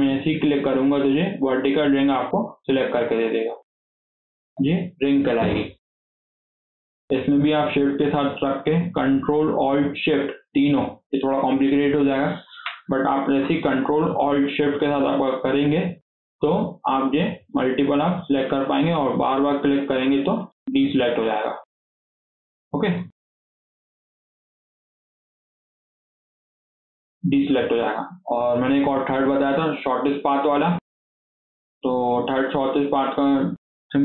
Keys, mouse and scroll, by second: 0.2 ctrl+alt+click, 0.6 scroll down 4, 0.9-2.0 shift+middle drag, 2.0 alt+z, 2.2 scroll down 2, 2.3-4.0 middle drag, 4.0 alt+z, 4.4 KP_7, 5.1 scroll down 2, 5.3 shift+middle click, 5.6 scroll up 2, 5.9 shift+middle click, 6.7-7.3 scroll up 3, 7.3-10.5 shift+middle drag, 15.9 ctrl+alt+shift+click, 16.8 ctrl+alt+shift+click, 17.2 ctrl+alt+shift+click, 17.8 ctrl+alt+shift+click, 18.2 ctrl+alt+shift+click, 18.9 ctrl+alt+shift+click, 20.2 ctrl+alt+shift+click, 20.9 ctrl+alt+shift+click, 21.5-22.0 scroll down 3, 22.0-22.5 scroll up 1, 22.5 alt+z, 22.8 click, 23.2 scroll down 3, 23.3 alt+z, 24.3 alt+z, 24.8 ctrl+click, 25.2 scroll down 1, 25.4 alt+z, 25.6 scroll up 4, 25.9 shift+middle click, 26.2 shift+scroll down 1, 26.3 shift+middle click, 27.1 click, 27.4 scroll down 2, 27.6-31.5 shift+middle drag, 31.5 scroll up 2, 31.7-34.0 middle drag.